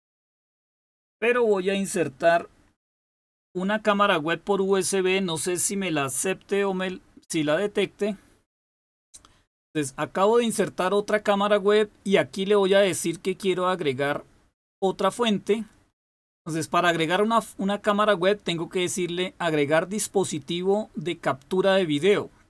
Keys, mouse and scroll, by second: 14.6 click.